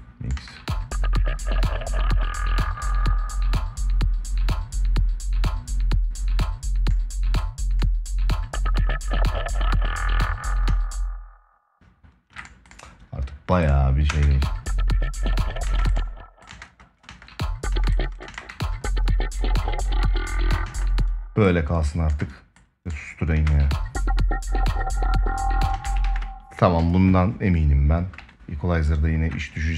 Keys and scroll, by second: 0.1 space, 10.4 space, 13.8 space, 15.4 space, 20.4 space, 23.1 space, 25.5 space, 25.7 ctrl+s.